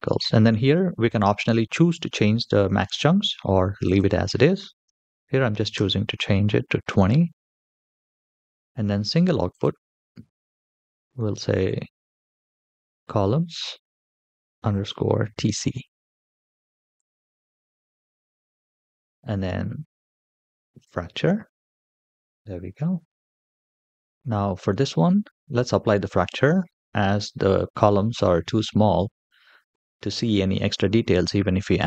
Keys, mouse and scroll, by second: 3.6-5.6 drag, 6.7-8.6 scroll down 2, 8.8 click, 9.3-16.8 drag, 20.6 click, 21.7 scroll down 4, 21.9-22.8 middle drag, 31.4-31.8 middle drag.